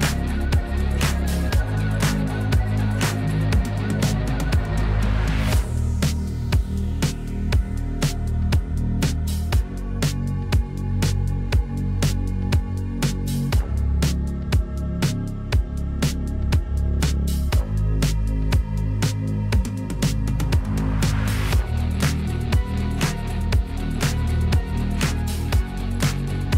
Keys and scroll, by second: 5.5 \, 7.2 m, 11.0 \, 13.5 F3, 17.1 m, 20.9 \.